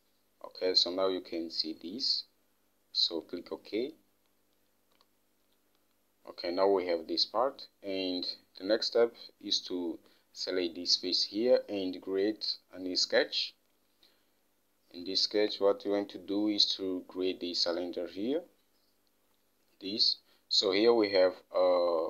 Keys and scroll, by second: 5.3 Home, 15.7 alt+Tab.